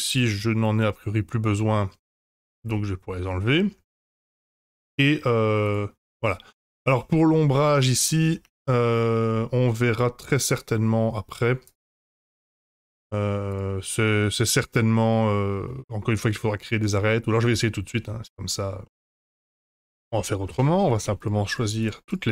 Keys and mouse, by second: 0.1 click, 2.0 middle drag, 2.3 h, 2.7-3.3 middle drag, 3.8 Tab, 4.2 middle drag, 5.6 click, 6.2-6.6 middle drag, 7.2 middle click, 8.0 Tab, 8.4 Tab, 8.9-10.4 middle drag, 11.2 Tab, 12.4-13.5 drag, 15.6 middle click, 18.8 middle click, 19.2 ctrl+s, 19.2 F5, 20.5 Tab, 21.0 3, 21.2 click, 21.5 shift+click.